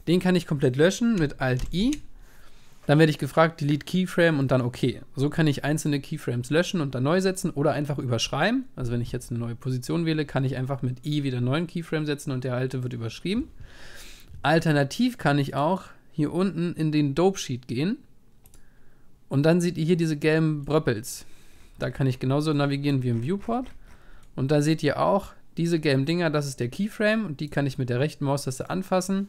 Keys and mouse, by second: 1.6 alt+i, 15.4-18.5 drag, 19.8-26.3 middle drag, 27.4-29.2 right drag.